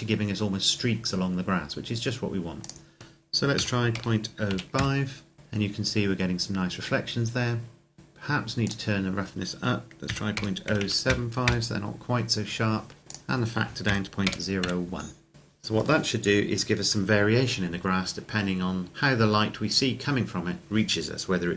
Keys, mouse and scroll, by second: 2.5 click, 3.4 KP_Decimal, 3.7 KP_0, 4.3 KP_5, 4.9 KP_Enter, 5.3-6.9 scroll down 1, 7.9-8.5 scroll up 1, 8.5 click, 9.9 KP_Decimal, 10.1 KP_0, 10.5 KP_7, 11.4 KP_Enter, 13.0 click, 13.6 KP_Decimal, 14.0 KP_0, 14.4 KP_1, 15.3 middle click.